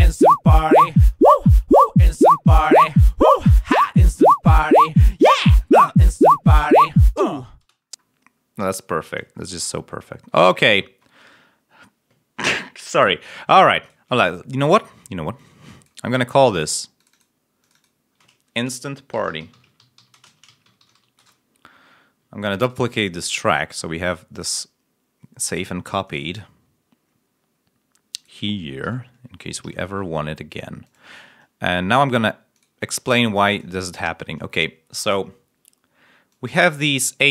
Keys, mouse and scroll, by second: 2.7 scroll up 1, 4.7 ctrl+scroll down 2, 7.7 ctrl+space, 7.7-8.1 ctrl+scroll up 2, 9.3-9.8 scroll down 4, 10.4 scroll down 2, 13.7 click, 14.3 scroll down 2, 15.3 click, 16.3 click, 16.9 click, 17.5 click, 19.0-20.8 typing, 21.1 shift+Return, 22.6 ctrl+right click, 24.2 click, 26.0 click, 27.3 scroll down 1, 28.1 click, 28.7 ctrl+Up, 29.5 ctrl+Up, 31.5-32.0 scroll up 2, 33.3 click, 34.5 click, 36.2 click, 36.8-37.2 ctrl+scroll up 2.